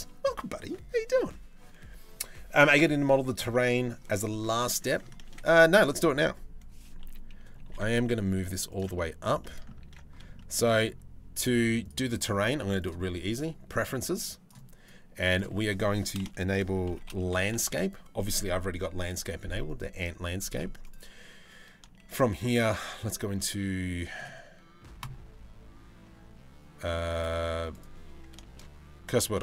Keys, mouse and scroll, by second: 3.1 middle click, 3.9 middle click, 4.3 Tab, 4.9 ctrl+s, 5.5 a, 6.6 KP_3, 7.2 g, 8.5-8.9 middle drag, 9.0 middle drag, 9.7 ctrl+s, 10.0 shift+middle drag, 11.4-12.6 drag, 21.6 shift+s, 28.1 shift+s, 29.1 shift+middle drag.